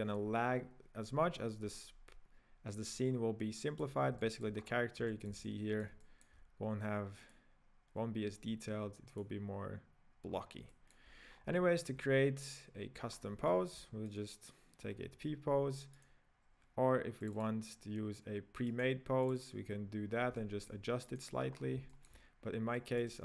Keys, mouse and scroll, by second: 1.8 scroll up 2, 3.2-3.5 scroll down 3, 3.5-4.6 middle drag, 4.6-5.1 scroll up 6, 5.1-7.6 shift+middle drag, 7.6 click, 9.2 click, 10.3-10.7 scroll down 6, 10.7-11.3 middle drag, 11.5 scroll down 3, 11.6-13.1 middle drag, 13.1-13.5 scroll up 3, 13.5-14.2 shift+middle drag, 14.2-14.9 right drag, 14.9-16.1 scroll up 4, 16.1 right click, 17.2 click, 17.5 click, 18.8 right click, 19.2 click, 19.5 click, 20.1 scroll up 3, 20.4-21.2 shift+middle drag, 21.2 right click, 21.5 scroll up 4, 21.9 shift+middle click, 22.7 click.